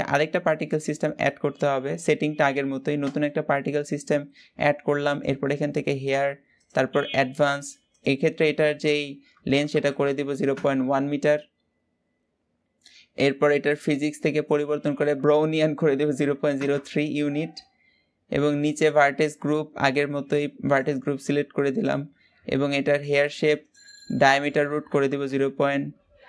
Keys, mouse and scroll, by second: 3.5-5.5 drag, 6.6 click, 10.5 click, 19.8-26.2 drag.